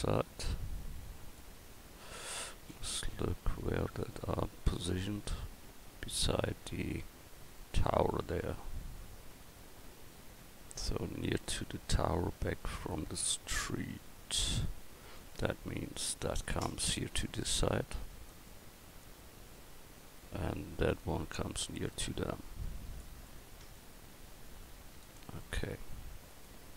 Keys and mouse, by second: 3.0 KP_1, 16.5-18.3 right drag, 18.3 click, 20.8-23.0 right drag, 21.9-23.0 drag, 23.4 middle click, 25.6 middle click.